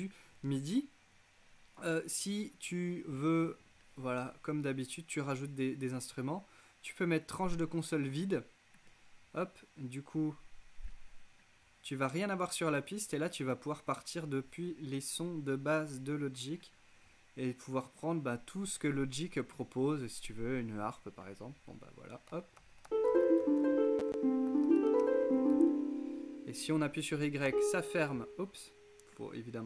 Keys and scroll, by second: 22.6 super+k, 22.8-26.2 typing, 27.6 y.